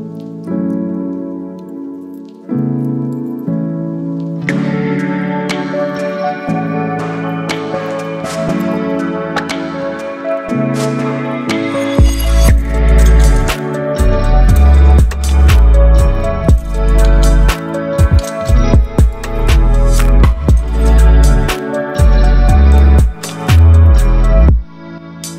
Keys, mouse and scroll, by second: 2.2-5.0 alt+drag, 8.9 ctrl+t, 10.7 click, 10.7-11.9 drag, 15.2 shift+click, 16.6 ctrl+t, 18.4-20.3 drag.